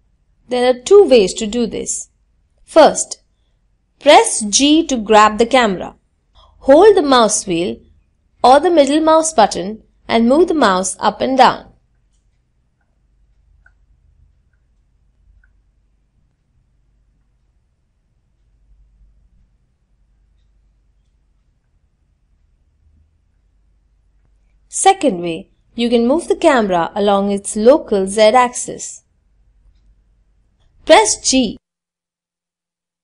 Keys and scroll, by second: 2.6 g, 28.8 g, 28.8 z.